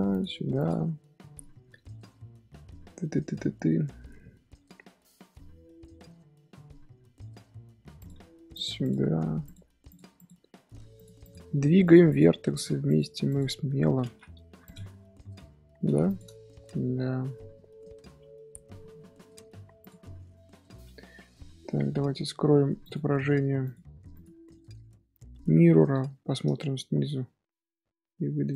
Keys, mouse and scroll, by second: 0.1 click, 0.9 scroll down 2, 1.2-3.3 shift+middle drag, 3.3 scroll up 1, 5.3-7.9 middle drag, 7.9 click, 8.8 click, 9.4 click, 9.7 g, 10.1 click, 11.2 click, 12.0 click, 12.8 click, 14.0 ctrl+z, 14.4 g, 17.5-18.2 middle drag, 18.2 Tab, 18.5-19.8 shift+middle drag, 19.8 click, 21.1 scroll up 1, 21.8 Tab, 22.8 click, 22.9 scroll down 1, 23.0 scroll up 1, 23.6 click, 24.1 click, 24.6 scroll down 1, 24.8-25.9 middle drag, 25.9 ctrl+KP_7, 26.7-27.0 shift+middle drag, 27.0 Tab, 27.0-27.9 scroll up 2, 27.9 g.